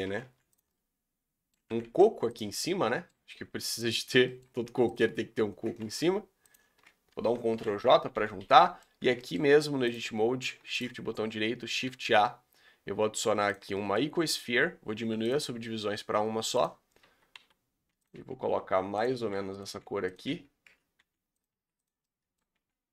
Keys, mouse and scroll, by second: 0.0 r, 0.6-1.7 middle drag, 1.7 r, 2.5-3.8 middle drag, 3.8 b, 4.1 scroll down 1, 4.2-4.9 middle drag, 4.9 shift+click, 5.8 ctrl+z, 6.5 shift+click, 6.9 scroll up 3, 7.6 ctrl+j, 8.1 g, 8.5 middle drag, 8.8-10.7 scroll up 5, 9.0 Tab, 9.1 middle click, 10.7 shift+right click, 13.5 shift+a, 13.7-15.3 shift+middle drag, 15.3 click, 15.9 s, 17.0 a, 17.3 s, 18.1 g, 19.1 s, 19.6 g, 20.2 Tab, 20.6 Tab, 21.0 g, 21.5 s, 22.0 middle click, 22.5 g.